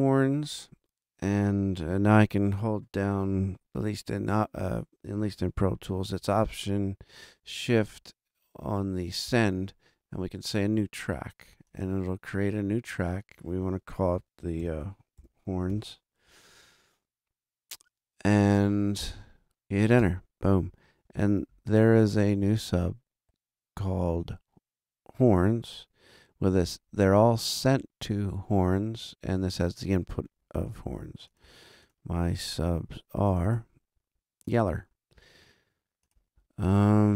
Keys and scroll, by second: 14.4-16.2 typing, 20.0 Return.